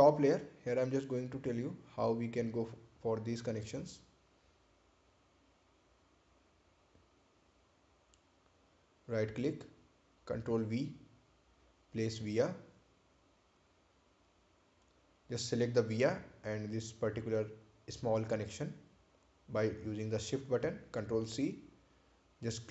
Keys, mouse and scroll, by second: 1.7 scroll up 1, 2.7 click, 6.6 click, 7.9 right click, 10.5 right click, 11.4 ctrl+v, 12.6 click, 14.9 click, 20.9 ctrl+c.